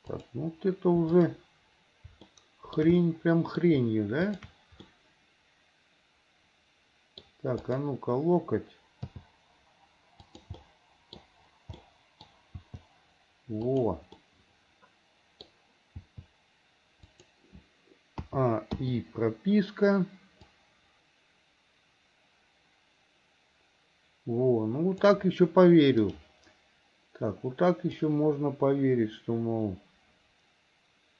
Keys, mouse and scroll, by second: 1.2 click, 2.4 shift+middle click, 3.0 middle click, 4.3 shift+click, 4.9-7.3 middle drag, 7.7 click, 9.2 g, 10.6 middle click, 11.8 middle click, 12.7 g, 14.2-15.5 middle drag, 16.1 g, 17.2 g, 18.3 a, 18.8 i, 20.6-25.2 drag, 26.0 click, 28.0-31.1 drag.